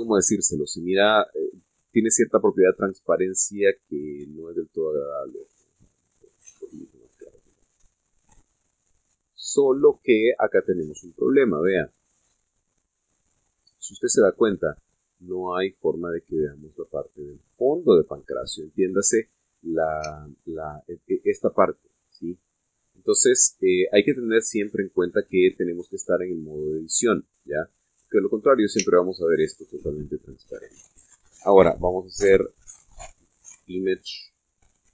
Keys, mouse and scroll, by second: 4.9 click, 5.4-6.1 drag, 6.3 click, 6.9 click, 7.3 click, 8.7-9.7 scroll up 6, 10.0-10.4 scroll down 2, 10.6-11.0 scroll up 2, 11.3-12.1 scroll down 4, 12.3-12.7 scroll up 2, 13.2 scroll up 2, 13.5-14.0 scroll down 4, 14.2-14.6 scroll up 2, 14.7 scroll down 2, 15.1 scroll up 2, 17.8-18.3 scroll up 1, 18.5-19.3 scroll down 2, 21.0 Tab, 24.6-25.3 scroll up 2, 26.1 scroll down 2, 28.5 middle click, 29.4 middle click, 29.7 Tab, 34.6 click.